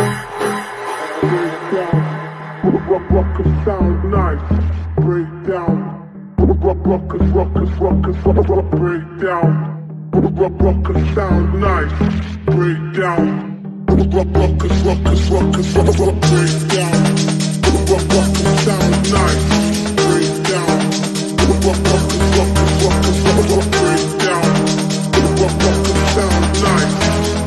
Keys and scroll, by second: 12.8 space, 26.5 shift+F2, 27.0 F3.